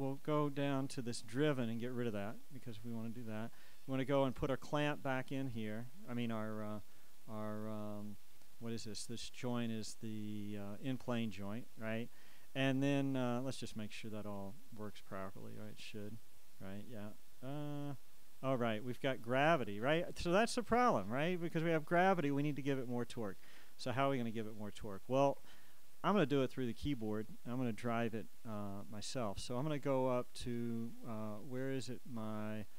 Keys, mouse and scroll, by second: 0.1-3.3 drag, 4.2-12.3 right drag, 9.0-12.3 shift+drag, 12.5 click, 14.5 click, 16.1 click, 30.6-32.7 drag.